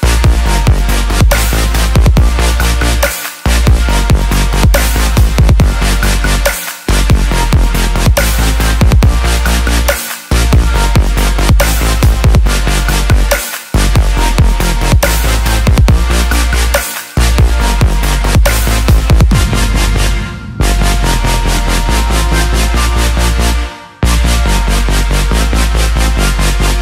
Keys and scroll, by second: 26.1-26.8 typing.